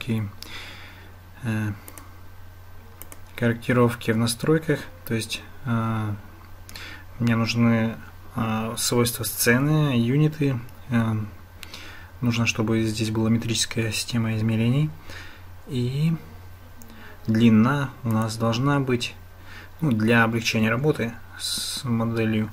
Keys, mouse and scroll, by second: 1.9 click, 3.0 click, 18.1-22.5 drag.